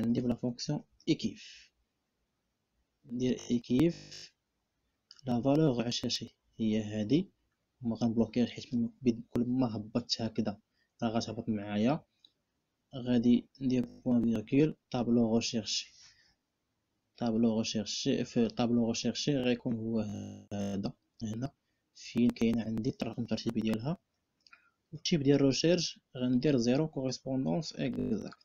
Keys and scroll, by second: 0.0-0.8 typing, 13.6 ., 24.7 ..